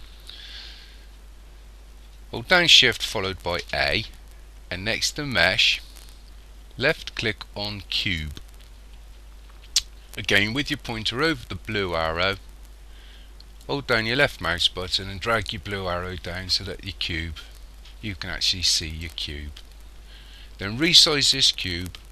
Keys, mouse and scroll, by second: 3.4 shift+a, 13.7 click.